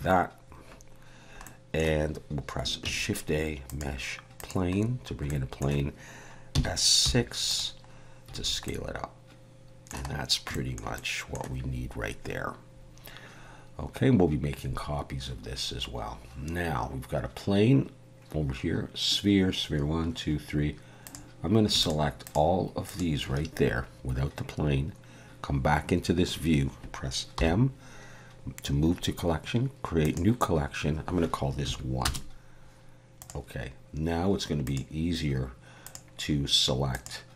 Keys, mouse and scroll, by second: 1.4 middle click, 2.8 shift+a, 4.8-5.5 scroll down 5, 5.3 middle click, 6.5 s, 7.9-8.3 scroll down 2, 8.4 alt+a, 8.7 middle click, 10.2-10.5 scroll down 1, 10.5 shift+middle click, 11.0 middle click, 21.0 click, 21.8 shift+click, 22.2 click, 22.9 shift+click, 27.4 m, 34.6 click, 35.9 click, 36.9 click.